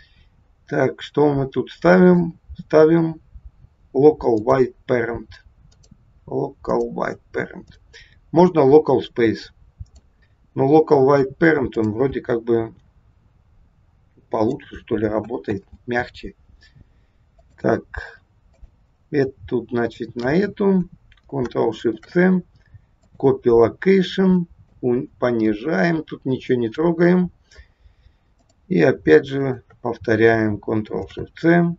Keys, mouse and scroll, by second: 0.6-1.6 scroll down 3, 2.0 click, 5.6 click, 7.6 click, 10.6 scroll down 2, 11.7 click, 12.6 g, 15.6 ctrl+z, 17.3 click, 18.5 click, 19.7 shift+click, 21.9 ctrl+shift+c, 24.6 click, 28.2 click, 29.2 shift+click, 30.9 ctrl+shift+c.